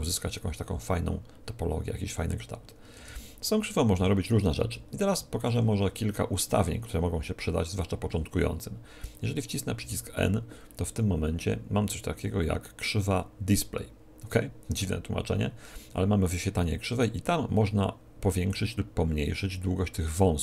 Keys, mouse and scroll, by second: 2.9 Tab, 3.9 g, 5.4-7.3 drag, 9.7 n, 18.4-20.2 drag.